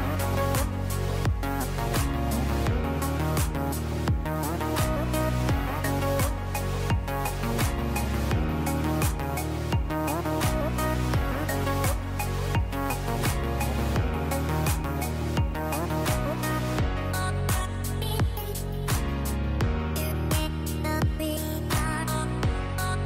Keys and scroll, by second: 2.1 space, 9.4 space, 14.3 space.